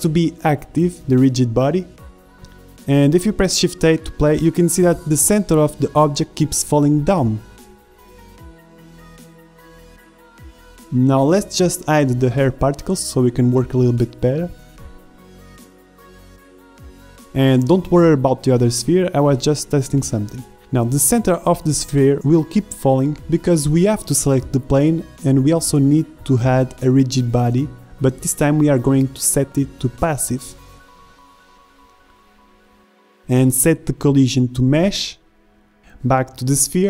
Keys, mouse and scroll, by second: 0.5 middle click, 2.3 shift+Left, 2.5 alt+a, 5.7-7.8 middle drag, 12.4-13.8 drag, 13.5 shift+Left, 15.3-15.7 drag, 16.8 shift+a, 28.5-28.9 drag, 29.0 middle click, 34.2 alt+a, 34.2 shift+Left, 36.8 click.